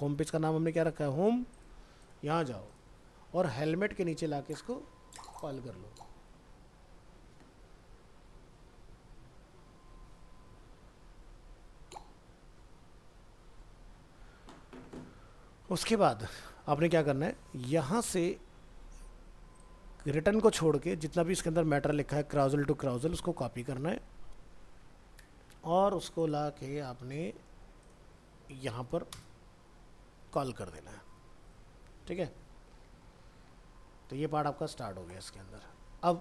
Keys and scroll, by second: 3.9 ctrl+v, 15.8 alt+Tab, 23.8 ctrl+c, 30.2 ctrl+v.